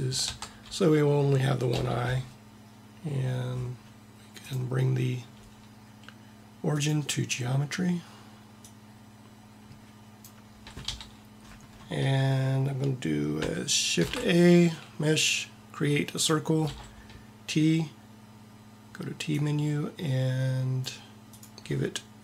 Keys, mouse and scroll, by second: 0.3 Tab, 1.8 t, 4.4-6.9 drag, 8.7-9.8 drag, 11.0 t, 11.6 x, 13.9 shift+a, 16.6 t, 19.3 click.